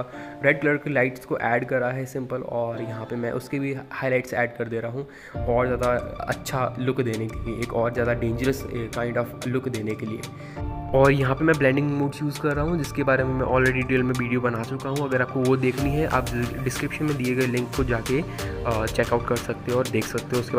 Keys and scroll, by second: 0.3 ctrl+KP_Add, 0.3 ctrl+KP_Add, 0.8 [, 3.4 ctrl+KP_0, 3.7 ctrl+d, 18.5 ].